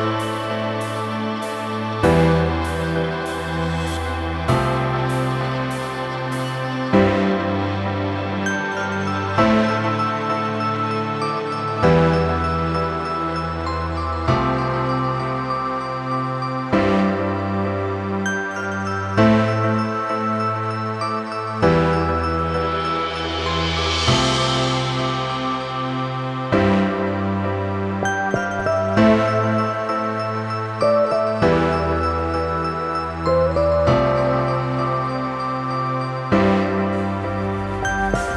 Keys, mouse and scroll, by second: 1.1 click, 1.7 click, 2.4 ctrl+click, 4.1 click, 4.7 shift+Page_Up, 5.7 click, 6.2 click, 6.6-7.0 scroll down 1, 7.0 click, 7.3-7.9 scroll up 1, 8.1 click, 8.3 double click, 9.2 click, 9.8 click, 10.1 double click, 11.5 click, 12.0-12.5 scroll down 1, 13.1 scroll up 1, 13.3 scroll down 1, 13.6 scroll up 1, 13.8 click, 14.5 F4, 14.9 click, 15.7 click, 17.2 ctrl+c, 18.3 click, 19.0 click, 19.4 scroll down 1, 19.7 click, 20.3 ctrl+z, 22.5 click, 22.7 double click, 23.4 Delete, 24.0 click, 24.8 ctrl+v, 26.0 scroll down 1, 26.4 click, 28.3 click, 29.7 click, 31.1 click, 31.9 click, 33.9 click, 34.8 click, 35.4 click, 36.9 scroll up 1, 37.2-37.6 scroll down 1, 37.6 click.